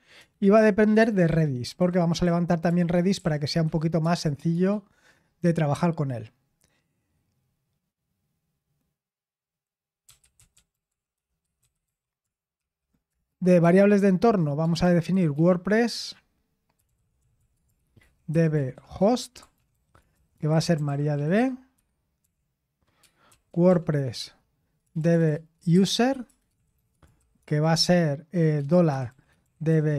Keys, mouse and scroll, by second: 0.0-5.0 typing, 9.8-12.6 typing, 13.1 Return, 13.6 Tab, 14.6-21.9 typing, 24.2-29.9 typing.